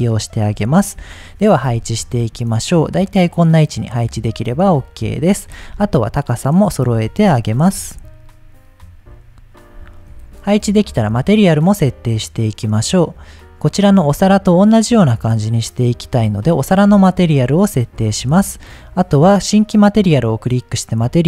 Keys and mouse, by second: 0.9 KP_7, 2.1 g, 3.2 drag, 4.1 middle drag, 5.0 KP_1, 5.5 g, 5.6 z, 6.7 click, 7.0-7.3 shift+middle drag, 7.7 g, 7.8 z, 9.0 click, 9.6 middle click, 14.4-15.7 drag, 16.6 shift+middle click, 17.5-17.9 shift+middle drag, 19.9 click.